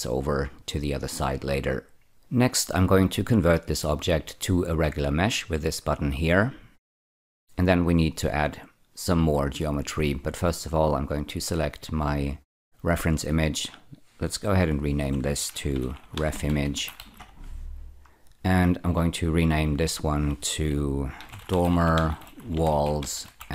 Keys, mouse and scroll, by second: 6.1 click, 6.8-8.6 scroll up 1, 11.7 click, 14.5 F5, 15.7-16.8 typing, 17.1 Return, 18.6 click, 19.6 F5, 21.1-23.5 typing.